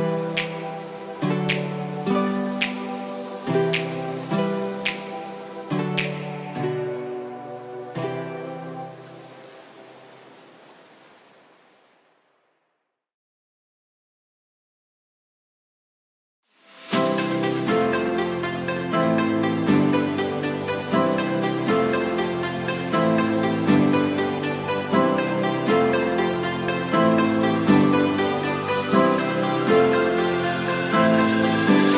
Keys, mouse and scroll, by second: 16.4 shift+a, 18.4 s, 19.6 r, 19.9 x, 21.0 g, 21.1 y, 21.7 g, 22.1 x, 23.4 y, 24.4-26.7 typing, 29.4 g, 29.5 y, 30.1 g, 30.3 x, 31.1 click, 31.8 g.